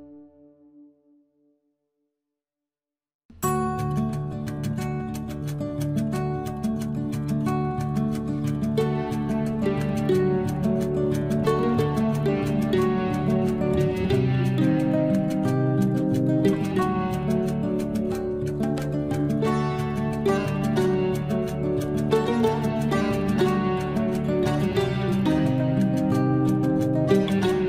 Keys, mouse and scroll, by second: 0.1 space, 1.0 l, 1.9 click, 4.9 space, 5.8 l, 6.4 click, 7.8 space, 8.9 l, 9.1 scroll up 1, 10.2 click, 11.3 space, 11.4 scroll down 1, 11.9-12.3 scroll up 1, 12.3 click, 13.5 Delete, 14.7 l, 15.2-16.3 scroll down 1, 16.3 click, 16.7 click, 19.2 space, 19.3 scroll up 1, 19.8-21.1 drag, 21.0 Delete, 21.4 scroll down 1, 21.9 scroll up 1, 22.4-23.1 scroll down 1, 27.3 scroll up 1.